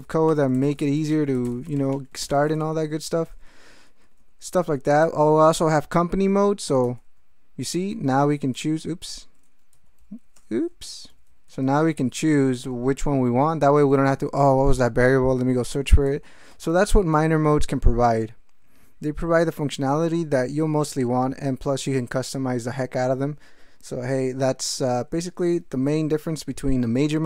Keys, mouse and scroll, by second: 0.0-3.4 typing, 3.8 ctrl+p, 4.5 ctrl+a, 4.7 ctrl+p, 4.9 ctrl+a, 5.0 ctrl+k, 6.7 ctrl+e, 6.8 m, 7.1 a, 7.8 Caps_Lock, 7.9 n, 8.5 BackSpace, 9.7 ctrl+c, 10.3 ctrl+BackSpace, 10.7 ctrl+Caps_Lock, 11.1 ctrl+c, 11.5 ctrl+n, 12.1 ctrl+p, 12.6 ctrl+n, 13.2 ctrl+p, 13.9 ctrl+g, 15.9 ctrl+a, 16.1 ctrl+k, 16.2 ctrl+p, 16.5 ctrl+k, 19.4 ctrl+p, 19.6 ctrl+e, 20.0 ctrl+k.